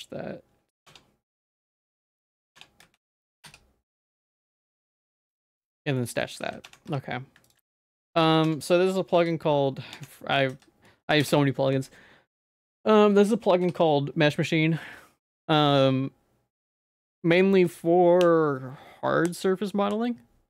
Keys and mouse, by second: 0.9 Tab, 1.7 ctrl+s, 2.0 ctrl+a, 2.2 ctrl+a, 2.6 Tab, 2.8 a, 3.5 y, 5.7 Tab, 6.0 middle click, 6.5 ctrl+s, 6.7 Tab, 6.9 2, 7.8 middle click, 8.3 ctrl+s, 8.5 Tab, 9.2 y, 10.2 Tab, 10.2 middle click, 10.5 a, 11.2 y, 13.7 y.